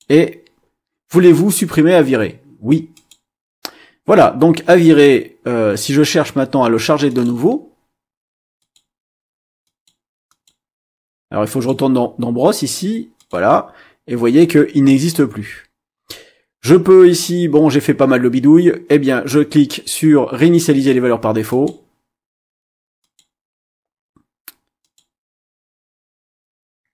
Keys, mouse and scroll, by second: 0.0 click, 2.9 click, 7.1 click, 8.6 click, 9.6 click, 10.3 click, 11.5 click, 13.1 click, 14.9 click, 21.5 click, 23.0 click, 24.8 click.